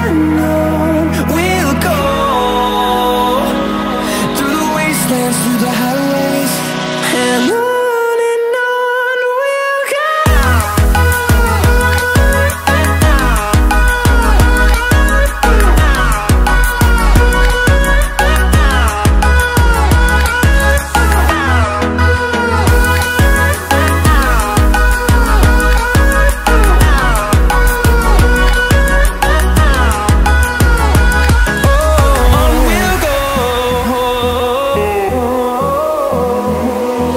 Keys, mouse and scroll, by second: 3.7 click, 18.0 click, 20.6-23.8 drag, 23.8-30.3 drag, 30.3 click, 35.7-37.1 drag.